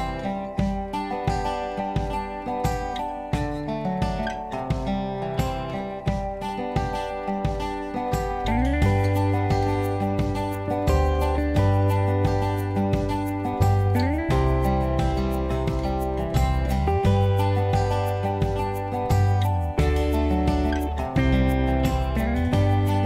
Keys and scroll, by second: 10.8 0, 10.9 Return, 14.0 9, 16.2 8.